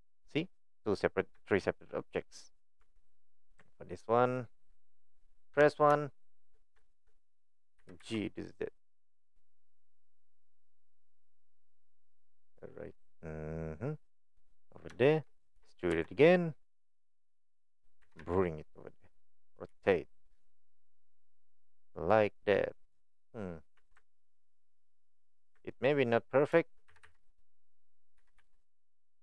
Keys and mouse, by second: 1.4 shift+middle click, 2.1 click, 2.8 Tab, 4.2 click, 5.5 KP_1, 6.2 shift+middle click, 6.9 shift+middle click, 7.8 g, 15.0 shift+middle click, 18.0 g, 19.7 r, 28.2 g.